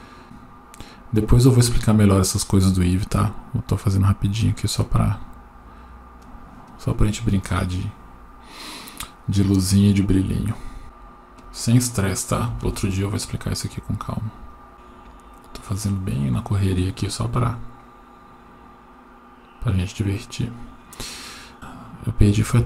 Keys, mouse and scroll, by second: 0.2-0.6 scroll down 8, 4.5 click, 4.9-6.2 scroll down 2, 6.2-6.6 drag, 6.2 scroll down 1, 10.8 g, 12.6 shift+a, 14.7 g, 15.4-15.7 drag, 21.9 right click.